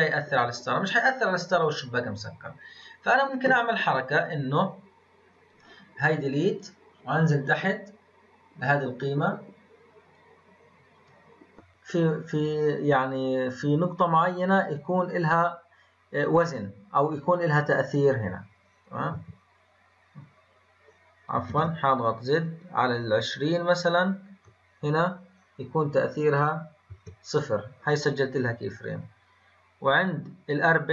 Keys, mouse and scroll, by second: 0.9-4.0 drag, 6.5-6.9 drag, 6.9-8.9 scroll down 16, 9.9 scroll down 2, 10.1-19.1 drag, 19.1 i, 21.5 ctrl+z, 22.4-25.5 drag, 25.8-26.9 drag, 28.9-30.9 drag.